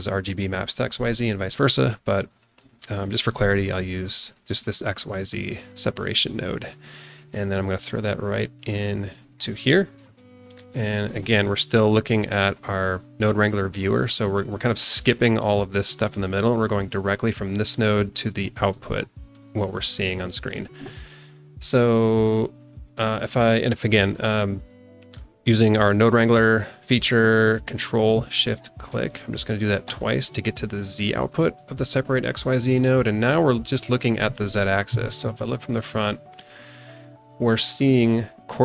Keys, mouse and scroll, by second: 2.2 click, 3.7 click, 4.3 click, 5.8 click, 7.5-9.4 drag, 9.7 scroll down 2, 10.1 shift+middle click, 10.9 scroll down 2, 11.2 shift+middle click, 12.2 click, 14.0 scroll up 1, 14.3 shift+middle click, 16.9 click, 18.2 scroll down 1, 18.4 shift+middle click, 19.5-19.8 scroll up 1, 19.9 alt+shift+middle click, 28.9 ctrl+shift+click, 29.9 ctrl+shift+click, 32.7-33.8 alt+middle drag, 33.8 alt+click, 34.8 KP_1, 35.7 middle click, 35.7 scroll up 1, 36.1 scroll down 1, 36.4 shift+middle click.